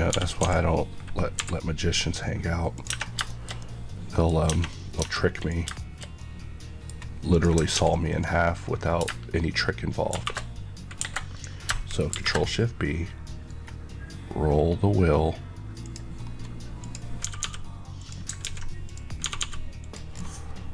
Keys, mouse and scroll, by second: 0.0-1.3 typing, 2.7 click, 2.8 Tab, 3.2 middle click, 3.5 middle click, 4.2 scroll up 1, 4.4 Tab, 4.6 middle click, 4.9 Tab, 5.3 click, 5.7 middle click, 17.9 click, 18.3 ctrl+x, 18.8 click, 19.2 g, 19.7 click, 20.1-20.7 scroll down 1.